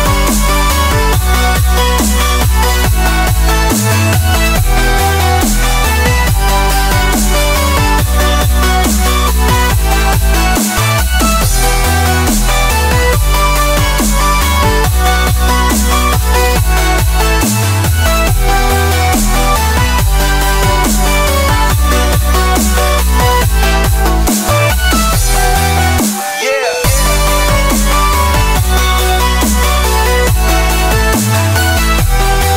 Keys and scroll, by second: 1.5 space, 4.0 shift+super+], 5.4 super+x, 7.0 super+f, 22.1 alt+shift+super+d, 26.5 super+d, 26.8 super+d, 28.0 space, 29.9 super+g, 31.0-32.1 typing.